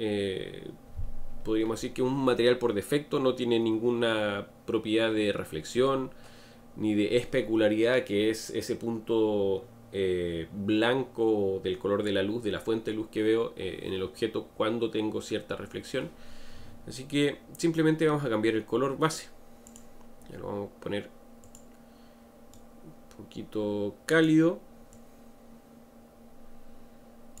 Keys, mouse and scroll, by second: 19.7 click.